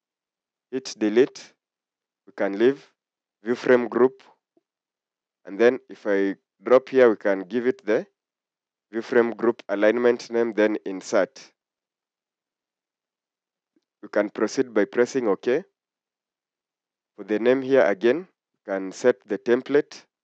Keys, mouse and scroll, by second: 3.9 1.